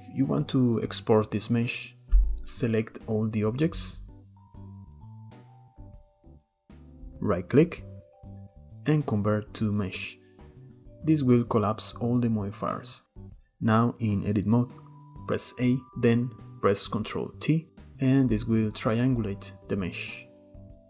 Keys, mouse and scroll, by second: 2.8 click, 7.8-10.9 right drag, 11.1-11.8 shift+middle drag, 11.8 click, 12.7 Tab, 13.7 a, 17.8 ctrl+t, 20.3 Tab.